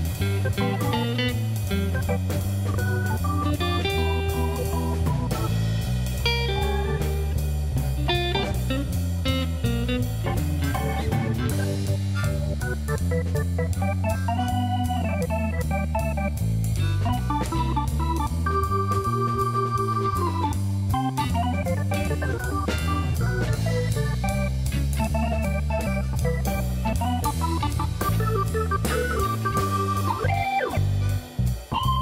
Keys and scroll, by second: 0.0 g, 0.1 z, 1.8 shift+d, 2.0 shift+z, 3.7 g, 3.8 z, 5.3 shift+d, 5.6 shift+z, 7.5 shift+d, 7.7 shift+z, 8.9 g, 9.0 z, 13.8 shift+a, 14.9 Tab, 19.0 ctrl+r, 19.4 7, 19.6 Return, 20.4 Tab, 20.7 g, 20.9 z, 21.4 Tab, 22.3 ctrl+b, 24.6 ctrl+-, 25.2 g, 25.3 z, 31.6 s, 31.9 0.